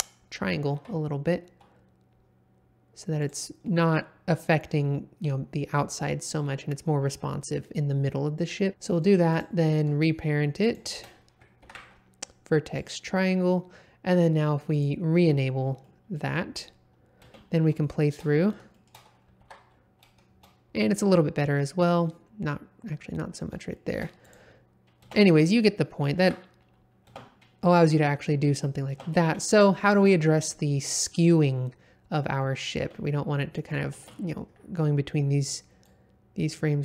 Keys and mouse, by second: 0.7 x, 3.2 click, 3.6 middle click, 10.6 shift+click, 11.6 ctrl+p, 14.7 click, 15.8-16.1 middle drag, 17.2 space, 17.8-18.2 shift+middle drag, 18.7 shift+middle click, 19.4 alt+a, 23.7 shift+middle drag, 24.3 click, 25.0 space, 26.2 shift+Left, 27.1 space, 28.9 space, 32.4 middle click, 32.8 space, 33.9 space, 35.8-36.8 drag.